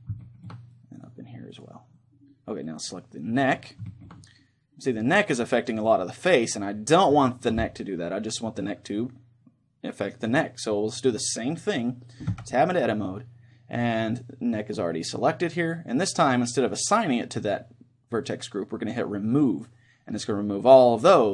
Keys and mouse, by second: 0.8-3.5 drag, 3.1-4.5 right drag, 3.5-11.7 middle drag, 12.3 Tab, 19.3-21.1 drag.